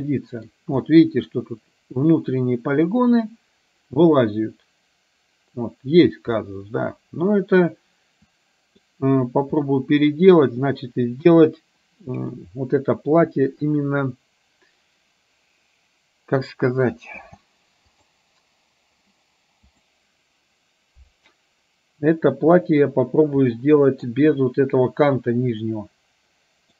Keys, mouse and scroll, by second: 0.0-0.6 middle drag, 1.0-1.5 middle drag, 6.6-9.0 middle drag, 9.7-10.5 middle drag, 11.3 KP_1, 17.3 space, 18.0 click, 19.7 click, 23.6-24.2 middle drag, 25.7-26.7 middle drag.